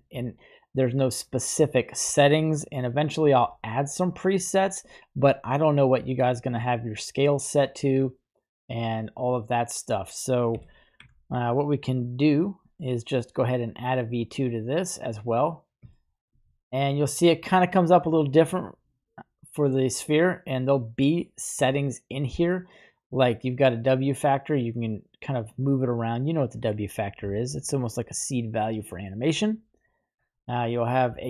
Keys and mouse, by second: 10.6 g, 11.0 z, 11.5 click, 14.1 click, 16.0 shift+middle click, 16.5-18.6 middle drag, 19.9 right click, 23.1-26.8 drag, 27.8 middle click.